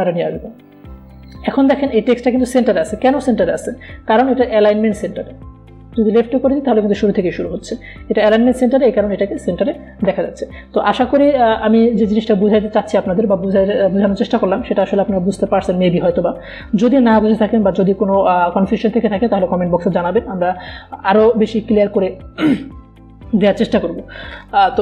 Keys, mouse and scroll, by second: 6.1 click.